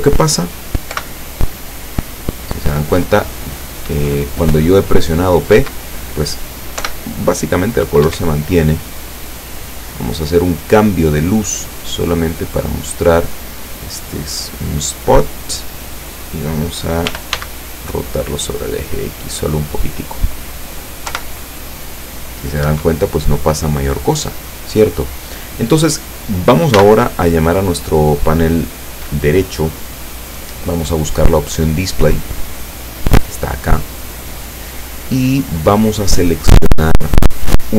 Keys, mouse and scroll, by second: 0.9 p, 5.6 Escape, 6.9 p, 8.2 Escape, 9.3 right click, 12.3 click, 13.4 scroll down 1, 13.9 scroll down 1, 14.4-15.7 middle drag, 17.1 r, 17.4 x, 18.7 click, 19.1 middle click, 21.1 p, 22.7 Escape, 26.8 n, 31.7 scroll down 2, 33.1 click, 33.7-34.1 scroll down 2, 34.2 scroll down 2, 37.5 click.